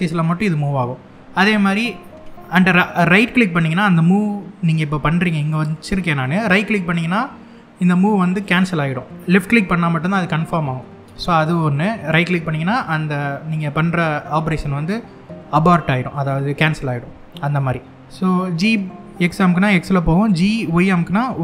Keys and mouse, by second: 8.0 right click, 18.6 g, 20.3 y.